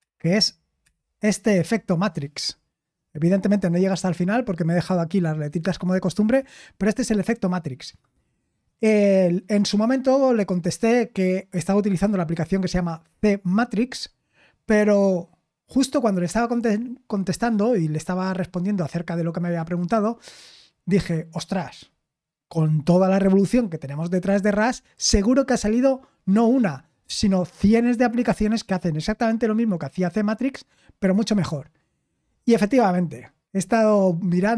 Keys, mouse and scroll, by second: 0.8 Down.